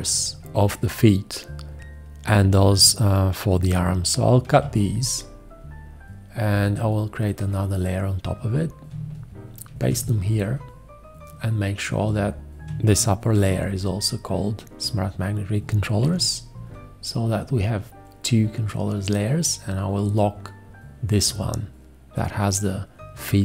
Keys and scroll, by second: 4.5 ctrl+x, 9.7 ctrl+shift+v, 13.4 ctrl+c, 16.0 ctrl+v.